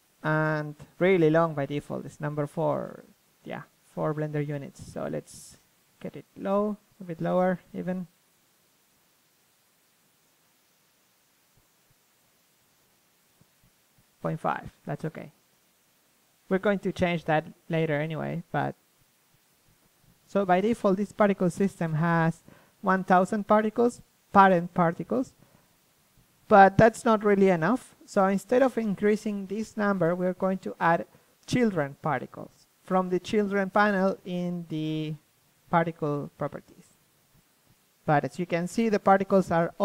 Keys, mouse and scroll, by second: 1.8-3.4 drag, 4.6-6.8 drag, 6.8 middle click, 7.0 KP_3, 9.9-15.4 drag, 15.6-17.4 drag, 16.7 KP_3, 17.4 middle click, 18.2-19.6 drag, 25.5-29.2 drag, 26.1 KP_3, 29.7-35.4 middle drag, 36.4 KP_1, 38.7 KP_3.